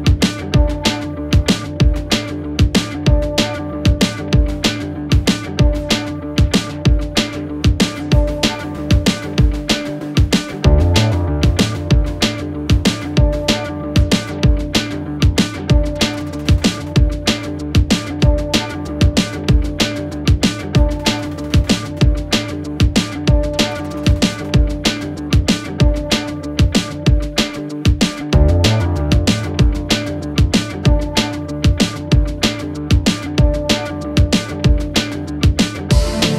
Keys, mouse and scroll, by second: 1.9 ctrl+t, 5.5-11.7 alt+drag, 11.7 Return, 14.7-23.0 drag, 28.6 ctrl+t, 31.4-36.3 alt+drag.